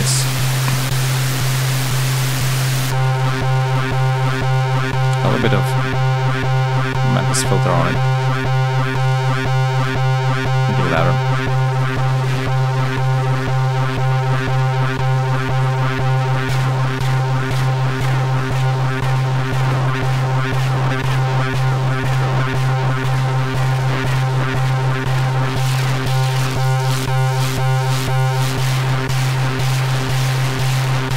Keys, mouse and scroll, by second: 1.0 click, 2.5-4.1 drag, 7.3 click, 7.9 click, 8.8 click, 9.5 click, 10.3 click, 10.7 click, 12.3 click, 12.7 click, 15.2 click, 16.1 click, 17.8 click, 24.6 click, 25.3 click, 25.9 click, 26.5 click, 31.0 click.